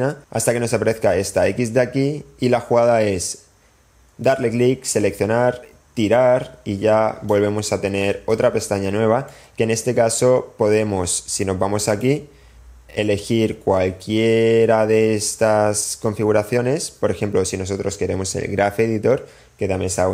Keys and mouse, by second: 4.5 middle click, 4.9-6.9 drag, 8.7 click, 9.5-10.5 middle drag, 12.1-20.1 drag.